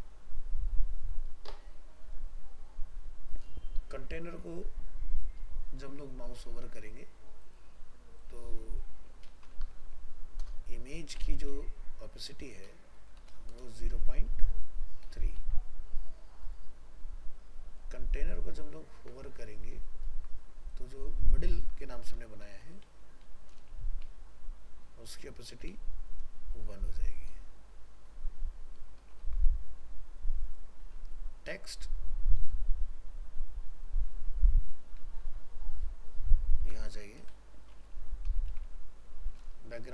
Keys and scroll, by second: 19.0 ctrl+c, 19.7 ctrl+v, 29.2 ctrl+s.